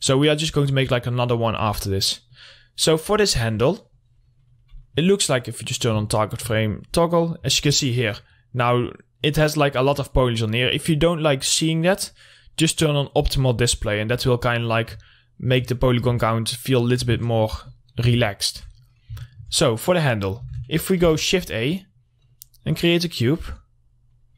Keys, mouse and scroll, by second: 0.6 click, 2.2 scroll up 2, 2.5 click, 4.7 middle click, 4.9-5.8 scroll down 1, 6.1 click, 6.6 alt+middle click, 7.2 click, 7.4 middle click, 8.1-8.4 scroll up 1, 8.7 middle click, 9.1 click, 10.1 middle click, 13.6 click, 15.8-16.8 alt+middle drag, 17.3-17.8 scroll down 1, 17.8 click, 18.1 scroll down 1, 18.4 middle click, 21.5 shift+a, 22.5 click, 23.1-23.7 scroll down 1, 23.7-24.3 drag.